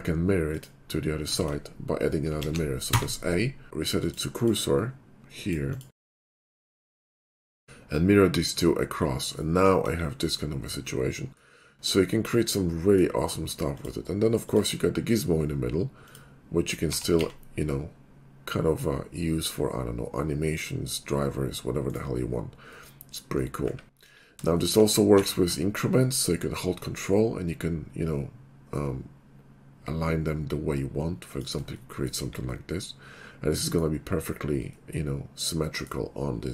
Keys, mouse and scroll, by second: 0.6 click, 1.4 ctrl+z, 2.5 alt+x, 2.9 a, 4.0 click, 4.4 click, 5.4 click, 5.7 click, 6.8 click, 8.4 click, 9.4 middle click, 10.4 middle click, 11.4 middle click, 13.1-13.7 middle drag, 13.7 click, 13.8-14.5 middle drag, 14.5 click, 15.1 right click, 16.0 click, 17.0 r, 17.2 z, 21.9-22.7 right drag, 22.9-23.4 middle drag, 24.6 shift+middle click, 24.8 r, 28.5-30.0 Up, 30.7-31.0 Up, 31.3-32.0 typing, 31.3 ctrl+click, 31.9 middle click, 32.6-34.9 middle drag, 35.9-36.5 middle drag.